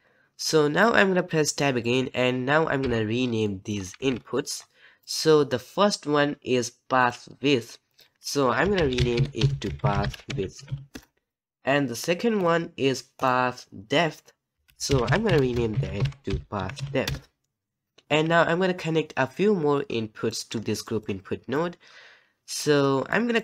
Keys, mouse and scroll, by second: 10.9 click.